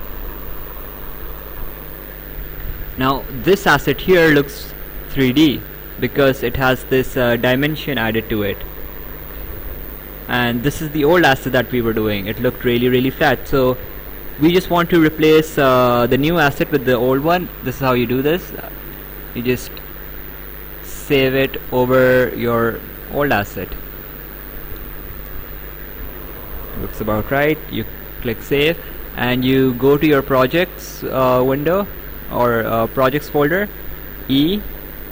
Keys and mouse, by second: 10.4 click, 14.3 click, 18.1 click, 22.1 click, 27.5 click, 30.0 click, 33.7 click.